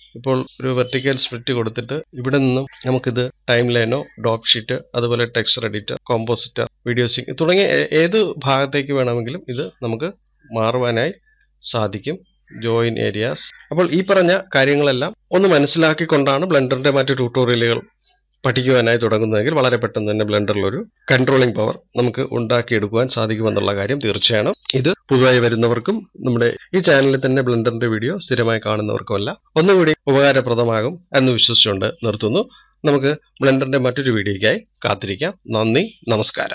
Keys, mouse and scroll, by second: 1.2 right click, 13.5 right click, 13.8-14.7 scroll down 2.